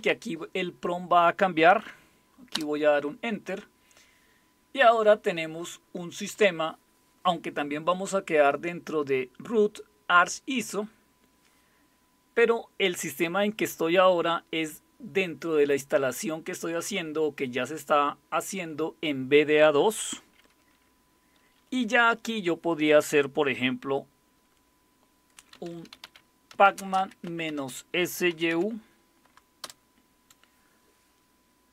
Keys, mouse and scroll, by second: 2.5 Return, 25.3-29.0 typing, 29.6 Return.